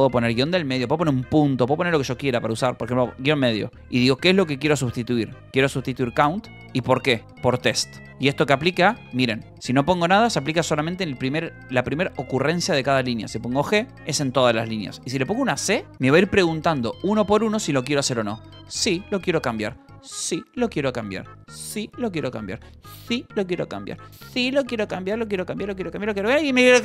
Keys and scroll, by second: 0.0-3.0 typing, 5.2-8.5 typing, 13.9 g, 15.5 c, 15.8 Return, 18.6 y.